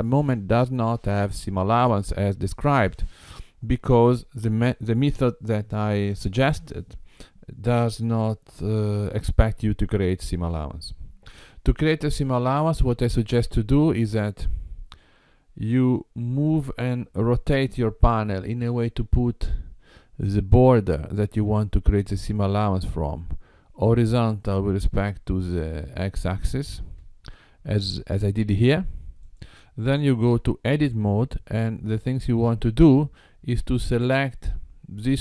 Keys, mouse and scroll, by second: 12.2 g, 17.5 r, 26.8 KP_7, 29.3 click, 30.4 Tab, 31.8-33.4 scroll up 3.